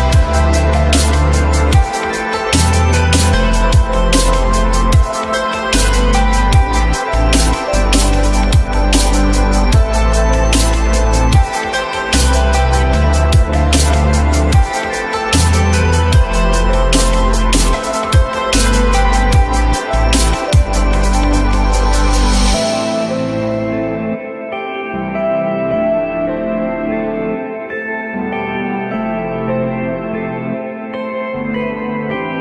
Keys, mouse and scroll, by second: 0.7 alt+middle click, 1.3 alt+middle click, 7.0 shift+click, 10.9 alt+middle click, 20.2 f, 23.9 alt+middle click, 24.9 alt+middle click, 26.2 F3, 27.9 F3, 28.9 alt+middle click, 29.2 alt+middle click, 29.8 r.